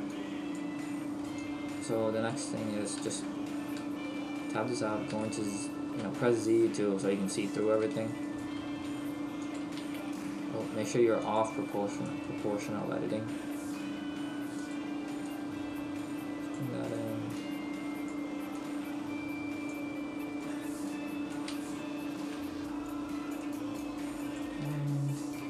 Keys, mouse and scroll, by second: 0.2 click, 3.0 Tab, 3.3-4.5 scroll up 2, 4.5 z, 5.3 shift+middle click, 7.6 right click, 8.1 shift+right click, 8.8 s, 9.5 click, 9.8 ctrl+z, 11.3 click, 14.8 click, 14.8 s, 15.4 click, 16.9 right click, 17.4 click, 18.8 click, 20.5 right click, 20.9 click, 21.7 shift+middle click, 23.4 right click, 24.7 click, 24.7 shift+middle click.